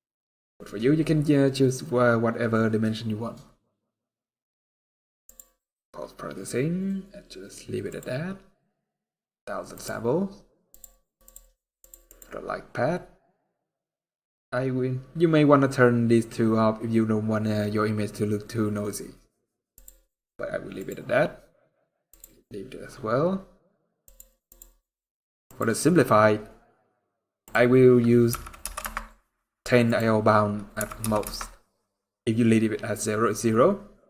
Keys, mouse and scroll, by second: 0.5-2.8 scroll up 3, 3.0-3.5 scroll down 2, 3.5-4.7 scroll down 10, 5.0 click, 5.3 scroll down 1, 6.7 scroll down 1, 7.6 scroll up 3, 7.6 click, 8.5-9.5 scroll up 3, 9.5 click, 10.4 click, 11.0 click, 11.5 click, 12.2 click, 12.2 scroll down 1, 12.9 scroll down 5, 19.5 click, 20.5 click, 20.8-21.8 scroll down 8, 21.8 click, 23.8 click, 25.0 click, 25.6 click, 25.6-27.2 scroll down 6, 27.2 click, 29.8 click.